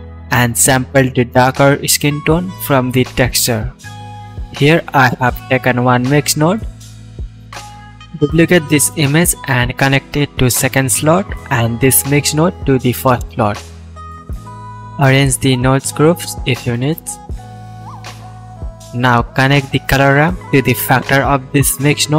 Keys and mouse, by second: 0.7-4.0 drag, 6.8 click, 7.0 shift+click, 7.4 shift+d, 8.6-16.0 drag, 16.8-17.7 drag, 17.5 ctrl+z, 20.7-22.1 ctrl+shift+middle drag.